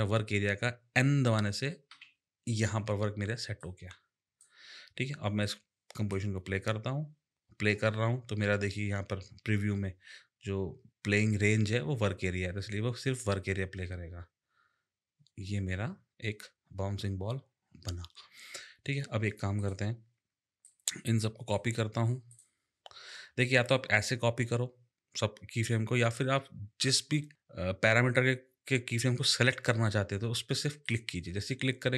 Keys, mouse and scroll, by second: 1.9 n, 3.6 click, 5.4 click, 13.5 space, 18.8 space, 19.6 click, 20.6 click, 22.3 click, 23.7 click, 25.6 click, 30.8 click.